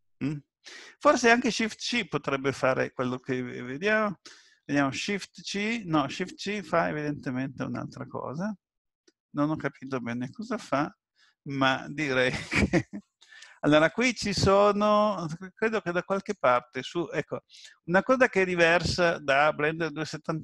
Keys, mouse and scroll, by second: 3.0 ctrl+z, 5.1 shift+c, 8.8 shift+c, 16.1 click.